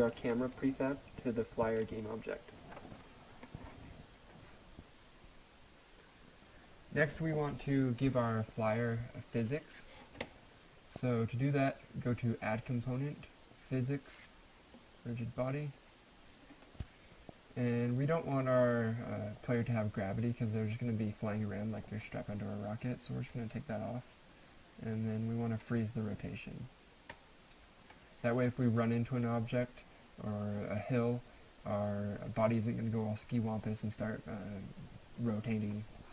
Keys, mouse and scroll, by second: 0.2 click, 4.2 alt+F9, 9.6 click, 12.6 click, 13.0 click, 23.3 click, 25.6 click.